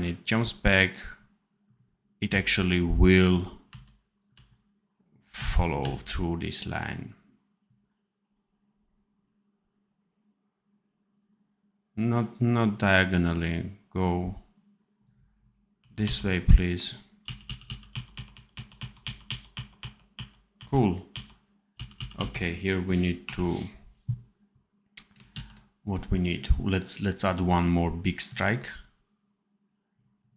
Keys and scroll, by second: 2.2 c, 3.6 c, 4.2 v, 5.3 c, 5.7 v, 15.7 r, 17.1 f, 17.8 r, 19.7 r, 21.1-23.1 typing, 25.3 ctrl+s.